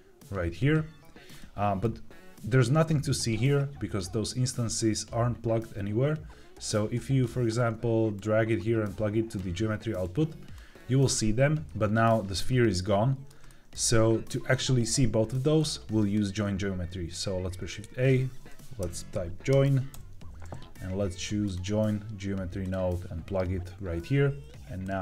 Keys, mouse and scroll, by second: 1.3 middle click, 6.6-7.2 drag, 8.1-9.3 drag, 9.9 click, 11.1 middle click, 12.7 middle click, 13.4 shift+middle click, 15.8 click, 17.5 shift+a, 24.7-25.0 drag.